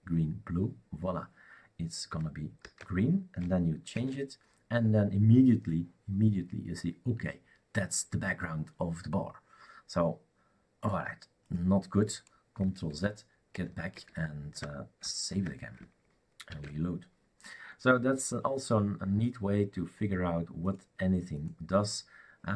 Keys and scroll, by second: 2.6 ctrl+s, 4.0 shift+super+r, 12.9 ctrl+z, 13.5 ctrl+z, 13.9 ctrl+z, 15.3 ctrl+s, 16.5 shift+super+r, 16.6 shift+super+r.